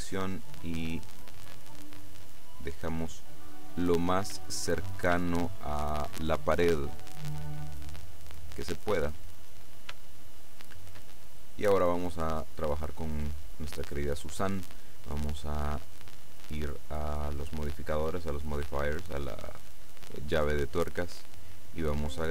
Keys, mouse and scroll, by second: 0.2-3.5 drag, 3.5-4.4 scroll up 1, 4.4 shift+scroll up 1, 5.4-6.6 shift+middle drag, 6.9 middle click, 7.1 click, 8.9-9.8 scroll down 2, 10.2-11.4 shift+middle drag, 11.4 shift+click, 16.0 click, 21.2 click.